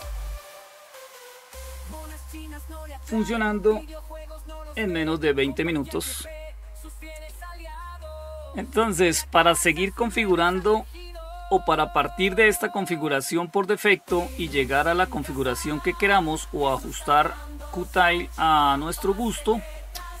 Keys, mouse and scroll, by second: 1.5-5.1 scroll down 2, 5.1-20.2 scroll down 1.